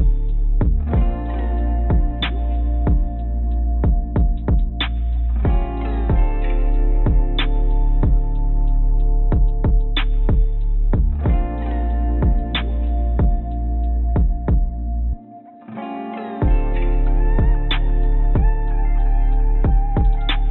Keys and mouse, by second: 2.2-3.3 drag, 3.8 3, 6.1 click, 7.3 shift+click, 10.0 click, 11.9 shift+click, 13.3-14.5 drag, 15.0 shift+click, 15.5 click.